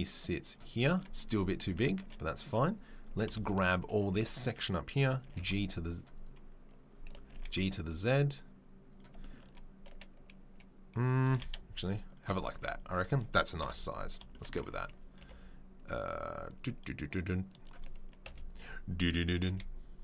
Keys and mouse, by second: 1.2 click, 1.3-20.0 middle drag, 1.7 Tab, 2.0 1, 3.3 b, 4.0 g, 11.2 g, 12.5 Tab, 13.6 KP_7, 14.5 Tab, 15.2 3, 19.5 b.